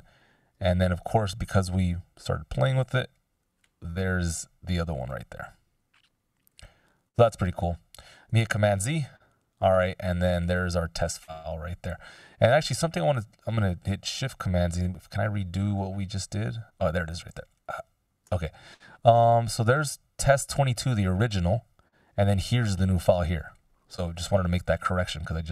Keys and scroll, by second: 1.1 ctrl+alt+super+m, 8.6 super+z, 15.1 shift+super+z, 15.6 shift+super+z.